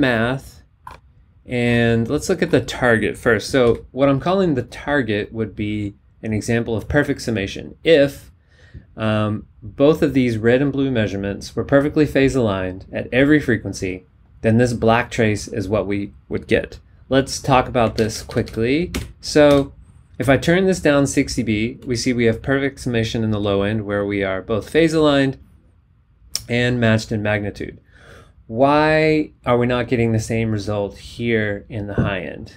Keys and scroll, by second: 3.6 b, 17.9 super+Down.